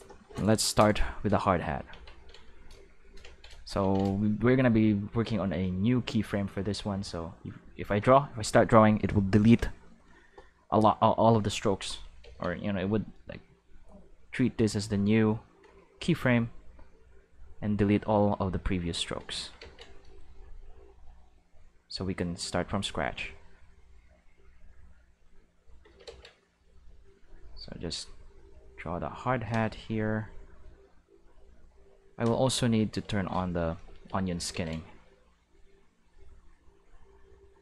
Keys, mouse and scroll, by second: 1.9 ctrl+Tab, 2.4 click, 7.0 click, 12.2 ctrl+z, 13.8-15.6 drag, 17.1-19.1 drag, 19.5 ctrl+z, 20.3-22.5 drag, 23.3-24.8 drag, 25.2 click, 26.0 ctrl+z, 26.5-29.3 drag, 30.6-32.1 drag, 32.6 q, 34.5 ctrl+z, 35.4-37.6 drag.